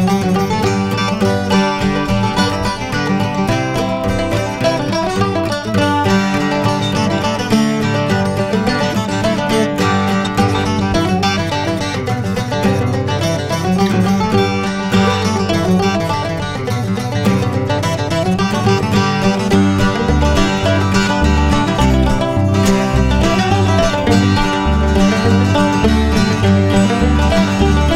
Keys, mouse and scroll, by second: 0.2-0.6 alt+scroll down 2, 0.8 scroll up 1, 1.2 scroll down 1, 1.9 scroll down 1, 2.4-3.0 scroll up 2, 3.3 scroll down 1, 3.4-4.0 scroll up 1, 4.0 click, 5.4 i, 5.7 click, 6.8 click, 8.8 click, 13.2 click, 15.2 click, 20.7 click, 22.6 click, 26.5 click.